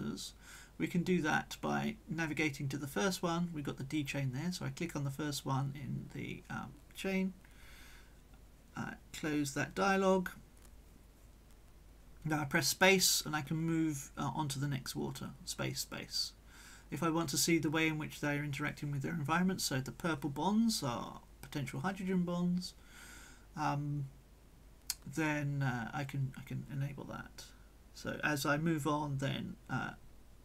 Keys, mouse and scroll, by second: 5.3 click, 6.2-7.2 right drag, 8.4 click, 9.3 right click, 9.8 click, 10.4-12.0 right drag, 11.0 click, 13.0 space, 14.2-15.4 drag, 15.4 shift+middle click, 15.9 shift+space, 17.8 middle click, 18.8-20.6 drag, 21.6 click, 22.6 click, 23.5-26.1 drag, 26.1 middle click, 26.4 click, 27.1 middle click, 27.3 click, 28.0 click, 28.6 click, 28.6 space, 29.1 space, 29.4 click, 29.8 space, 30.0 click.